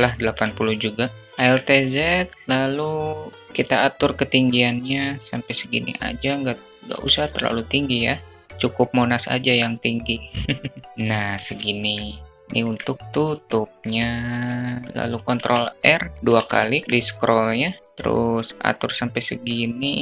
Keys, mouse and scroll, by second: 0.5 click, 1.2 alt+z, 3.6 alt+z, 3.6-5.9 drag, 6.4 Tab, 6.8 s, 10.9 alt+z, 11.9-12.3 middle drag, 12.4 click, 13.4 Tab, 14.9 ctrl+r, 15.2 ctrl+r, 16.1 alt+click, 17.0-18.9 drag.